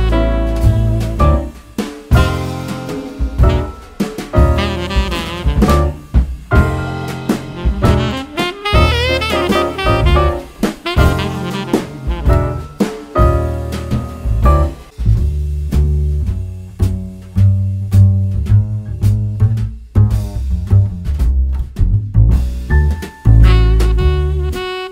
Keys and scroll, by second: 0.5 super+c, 0.7 super+v, 5.8 BackSpace, 6.0 BackSpace, 6.3 BackSpace, 8.1 super+d, 10.6 super+d, 11.0 super+d, 14.9 super+c, 15.1 super+v.